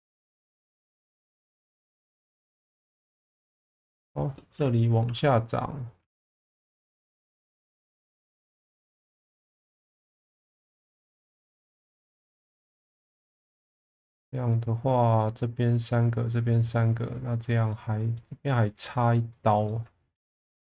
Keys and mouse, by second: 0.2 click, 0.6 1, 1.4 click, 2.4 click, 3.3 2, 3.7 click, 4.1 shift+click, 5.1 e, 6.0 1, 7.4 g, 7.5 b, 7.9 click, 9.3 click, 9.5 g, 9.6 b, 9.8 click, 10.4 click, 11.0 click, 11.7 click, 13.3 shift+middle drag, 17.7-18.2 middle drag, 19.3 click, 19.7-20.2 alt+middle drag.